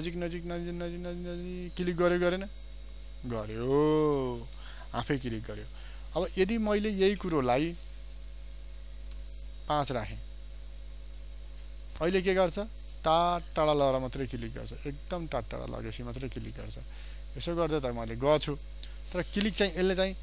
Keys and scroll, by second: 7.2 ctrl+d.